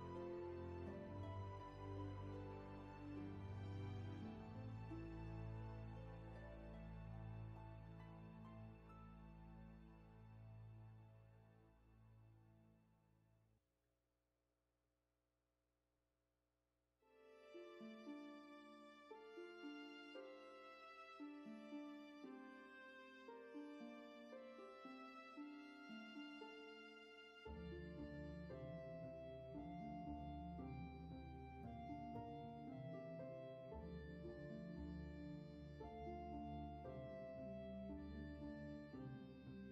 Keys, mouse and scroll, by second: 4.0 ctrl+z, 9.2 ctrl+z, 13.7 ctrl+z, 15.9 ctrl+shift+z.